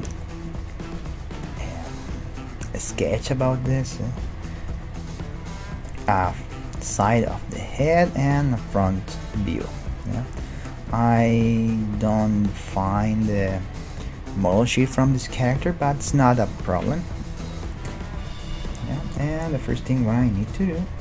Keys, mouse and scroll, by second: 0.3-2.1 middle drag, 3.3-4.5 scroll up 1, 4.5-10.5 middle drag, 10.8-14.1 drag, 13.3-15.1 middle drag, 18.0 middle click, 18.8 middle click, 19.3 Tab, 20.5 KP_1, 20.7 KP_5.